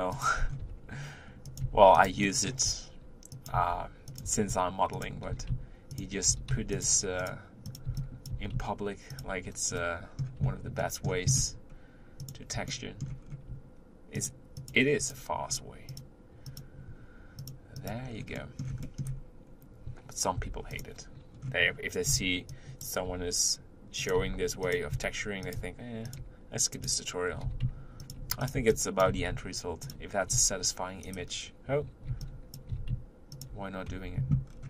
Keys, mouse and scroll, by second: 0.4 scroll up 3, 0.6 r, 1.6 s, 2.4 middle click, 2.6-6.3 typing, 7.2 click, 7.6 click, 7.8 b, 8.3 g, 9.7-12.3 middle drag, 12.3 click, 12.7 shift+middle click, 13.2-14.1 scroll up 2, 14.1 shift+click, 14.6 shift+click, 14.9 shift+click, 15.9 shift+click, 16.4 shift+click, 17.4 shift+click, 17.7 shift+click, 18.1-18.8 scroll down 3, 18.8 middle click, 19.4-20.3 scroll up 2, 20.3 u, 21.3-22.1 scroll down 1, 22.1 b, 24.2 g, 24.9 s, 25.5 r, 26.2 g, 27.4 g, 28.4 click, 28.5 b, 29.1 g, 30.3 v, 32.1 b, 32.7 g, 33.9 Tab, 34.5-34.6 scroll down 4.